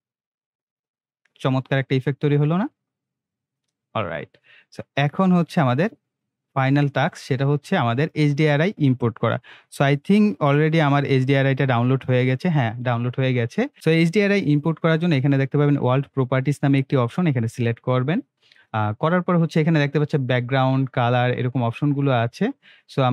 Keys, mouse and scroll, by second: 3.7 space, 5.0-7.9 drag, 10.3 click, 12.7 click, 17.1 click.